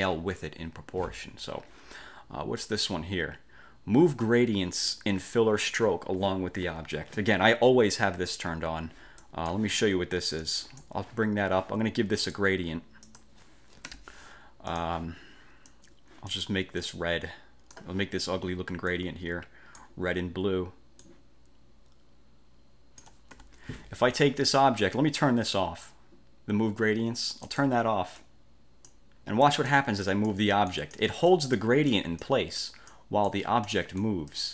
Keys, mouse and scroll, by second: 9.3 click, 10.6 click, 12.4 click, 13.2 click, 14.0 g, 14.8 click, 15.8 click, 16.9-18.0 drag, 19.0 click, 21.2-23.3 ctrl+drag, 23.4 ctrl+F1, 27.6 click, 28.3-29.2 drag, 29.6 click, 30.2 click, 30.8 click, 31.4 click, 32.0 click, 32.7 click, 33.4-34.0 drag, 34.1 click.